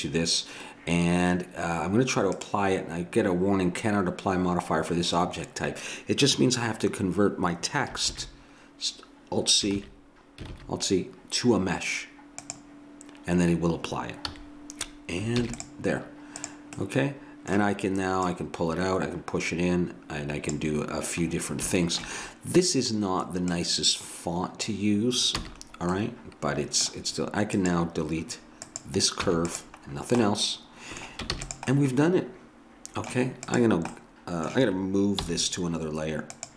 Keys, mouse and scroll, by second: 2.4-5.1 drag, 8.2 alt+c, 10.6 alt+c, 14.3 a, 15.4 ctrl+s, 16.4 right click, 16.8 click, 21.3-23.5 middle drag, 23.5-25.4 drag, 25.4 a, 25.5-26.6 middle drag, 27.6 right click, 28.5-30.7 drag, 29.2 x, 31.3 ctrl+s, 33.5-35.5 drag, 35.2 m.